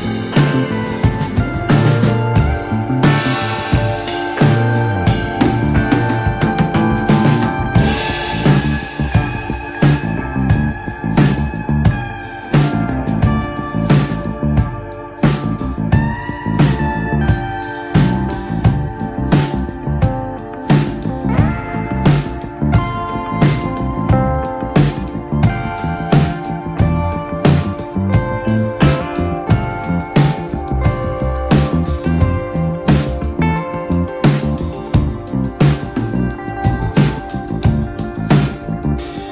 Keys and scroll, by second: 0.0-0.9 typing, 0.8 Escape, 2.7 b, 3.3 x, 4.9 ctrl+space, 5.1 r, 6.8 space, 10.1 space, 10.9 x, 12.6 Escape, 16.4 space, 18.4 ctrl+space, 19.1 x, 22.3 space, 24.8 space, 28.8 e, 30.3 x, 31.2 ctrl+z, 32.0 x, 33.6 space, 36.7 space.